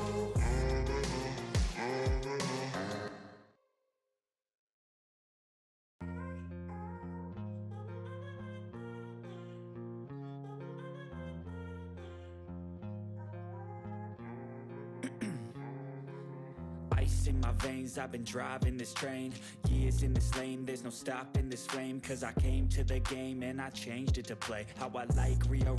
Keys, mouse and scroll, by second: 0.1 ctrl+space, 0.6-1.5 typing, 3.3 click, 3.4 ctrl+s, 4.3 click, 5.1 ctrl+s, 6.7 click, 7.2-11.0 typing, 12.6 ctrl+s, 12.7 click, 13.5 [, 13.8 ctrl+s, 15.1 Right, 15.5 ctrl+s, 17.8 click, 19.4 -, 19.6 ctrl+s, 20.8 click.